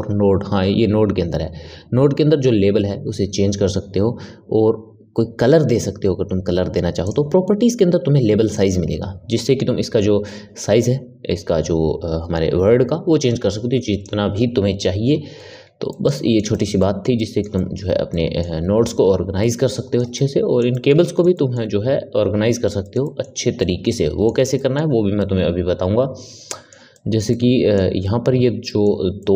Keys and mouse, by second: 6.9-11.6 drag, 14.9 n, 15.8-29.3 ctrl+middle drag.